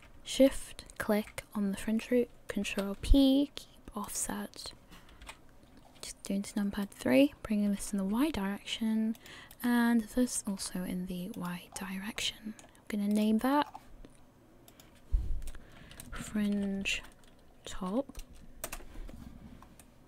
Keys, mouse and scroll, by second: 0.5 shift+right click, 2.7 ctrl+p, 5.2 KP_3, 7.0 right click, 7.7 g, 9.7 right click, 10.4 g, 11.7-12.2 scroll down 5, 12.2 middle click, 13.3 right click, 13.6 scroll up 2, 14.7 click, 14.7 scroll up 2, 19.8 middle click.